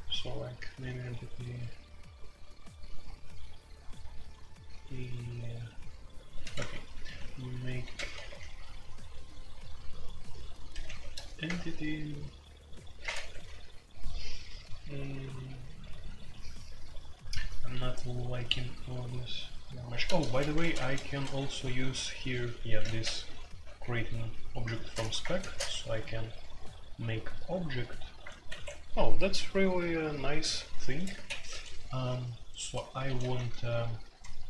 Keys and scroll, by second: 6.4-8.2 typing, 10.8 typing, 11.4 Return, 13.1 Escape, 20.0-21.0 typing, 22.6-23.8 typing, 24.9 ctrl+n, 24.9-25.7 typing, 28.4 Escape, 31.1-34.4 typing.